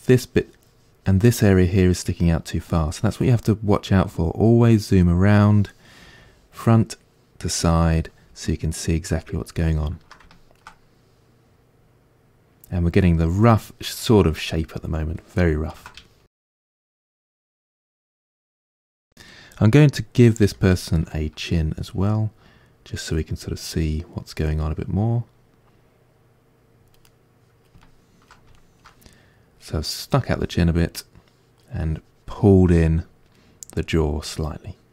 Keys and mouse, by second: 3.8-6.1 drag, 6.1-17.0 middle drag, 17.0-18.2 drag, 18.2-21.9 ctrl+middle drag, 20.4 f, 21.9-23.1 drag, 23.1-25.8 middle drag, 25.8-27.1 drag, 27.1-31.9 middle drag, 31.9-32.9 drag, 34.3-34.9 ctrl+middle drag.